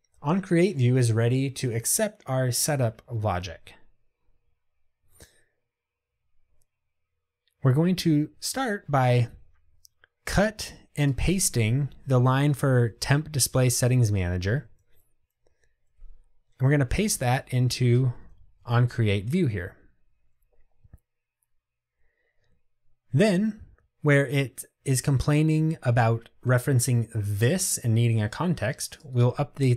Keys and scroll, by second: 14.9 super+c, 18.8 super+v.